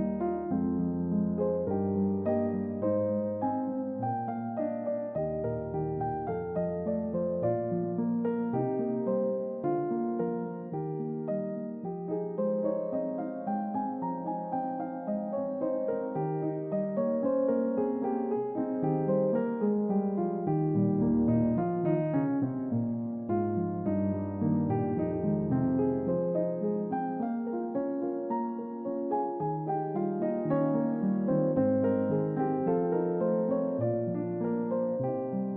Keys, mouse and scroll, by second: 1.7 ctrl+click, 2.2 ctrl+double click, 3.3-4.8 scroll down 1, 4.8 ctrl+click, 5.6 ctrl+double click, 6.1 ctrl+double click, 6.6 ctrl+double click, 7.1 ctrl+click, 7.6 ctrl+double click, 8.1-9.3 middle drag, 8.1-9.1 scroll down 1, 9.1 scroll down 1, 10.0 ctrl+click, 10.5 ctrl+double click, 11.0 ctrl+double click, 11.5 ctrl+double click, 12.4 middle click, 12.5 scroll down 1, 12.9-15.5 middle drag, 12.9-14.6 scroll up 1, 14.6-15.1 scroll up 1, 15.1-15.5 scroll up 1, 16.3 ctrl+click, 20.1 ctrl+l, 24.4 click, 25.6 click, 26.4-28.3 middle drag, 28.8 click, 29.1-30.1 middle drag, 30.4 click, 31.1 click, 31.6-32.1 middle drag, 32.3 click, 32.9 shift+middle click, 34.3 click.